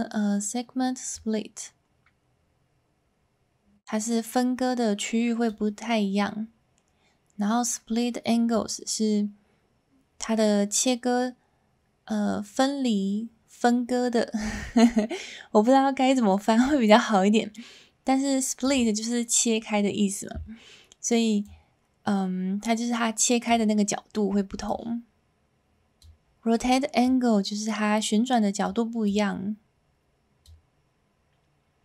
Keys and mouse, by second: 1.3-5.4 drag, 8.5-18.7 drag, 21.4-23.5 drag, 24.6-26.1 drag, 27.0-28.6 drag, 29.1-30.5 drag.